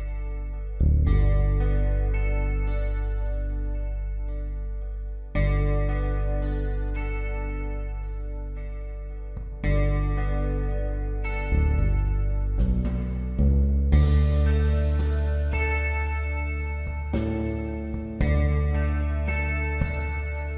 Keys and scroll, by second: 5.2 b, 12.1 b, 18.1 b.